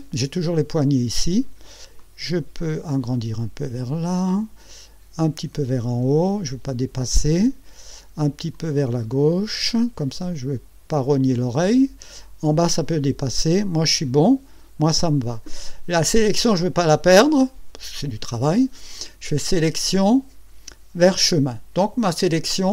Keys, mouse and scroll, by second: 2.0-4.5 drag, 5.2-7.0 drag, 8.5-11.9 drag, 19.5 click, 21.0 click.